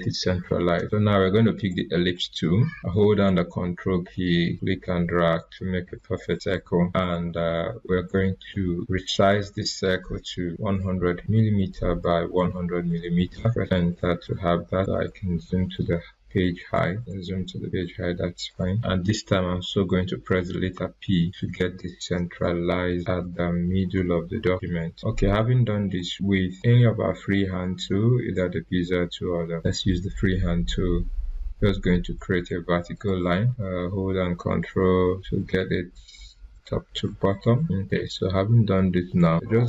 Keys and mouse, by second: 4.5-9.3 ctrl+drag, 10.2-11.3 typing, 12.2 Tab, 13.2 typing, 14.0 Return, 14.6 click, 20.7 p, 23.2 click, 25.9 click, 26.0-28.3 drag, 29.5 click, 32.9 click, 36.7 ctrl+Num_Lock, 36.7 ctrl+click, 37.6-39.6 drag.